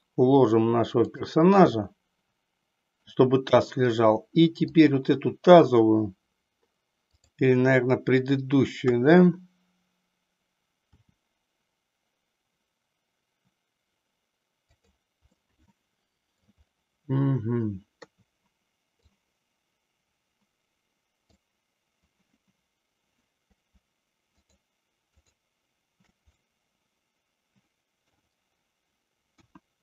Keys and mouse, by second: 1.8-3.1 middle drag, 4.7 click, 7.1 click, 8.7 KP_1, 10.8 r, 15.3-16.5 middle drag, 18.0 KP_3, 19.0-21.5 drag, 24.3 shift+click, 25.2 shift+click, 26.5-28.1 middle drag, 29.2 KP_1.